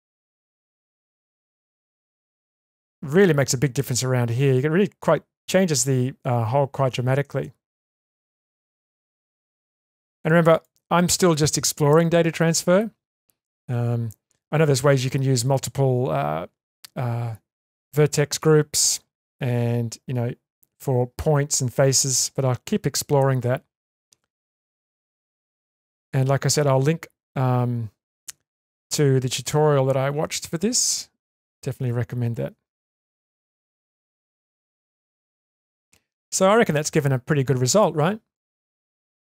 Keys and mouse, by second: 0.2 click, 0.7 click, 1.2 click, 1.7 click, 2.2 click, 2.6 click, 9.6 click, 10.5 click, 24.6 click, 25.2 click, 37.8 click, 38.4 click, 39.2 click.